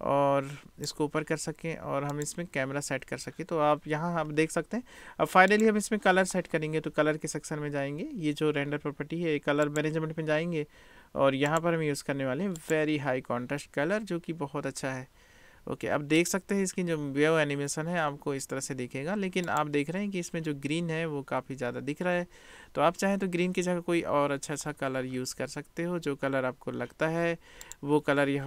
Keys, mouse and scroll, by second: 2.2 click, 9.7 click, 11.5-12.9 drag, 16.3 click, 19.6 click, 27.7 click.